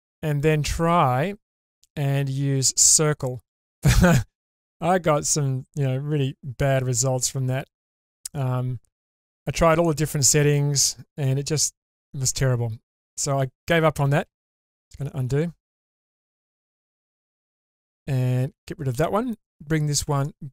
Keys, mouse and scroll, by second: 0.1 middle click, 1.6 click, 2.8 click, 3.7-9.0 middle drag, 10.4 click, 11.2 middle click, 12.4 ctrl+z, 12.9 ctrl+z, 13.2 ctrl+z, 13.7 ctrl+z, 14.0 ctrl+z, 14.3 ctrl+z, 14.4 ctrl+z, 14.6 ctrl+z, 14.8 ctrl+z, 15.0 ctrl+z, 15.1 ctrl+z, 15.6 ctrl+z, 16.0 ctrl+z, 16.8 middle click, 18.4 ctrl+z, 20.2 click.